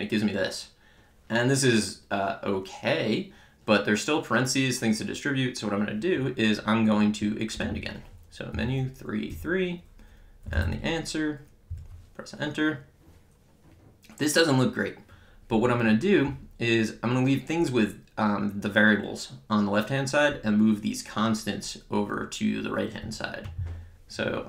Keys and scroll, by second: 7.7 Menu, 8.6 3, 10.3-11.1 typing, 11.8 Return.